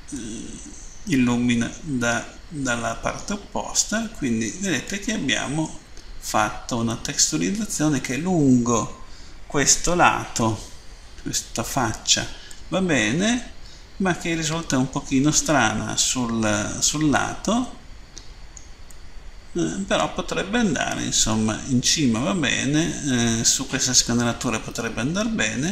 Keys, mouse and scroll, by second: 0.0 middle click, 3.9 scroll up 1, 6.9 middle click, 12.5 middle click, 16.3-17.1 scroll down 2, 17.1 middle click, 18.9 middle click, 24.1 middle click.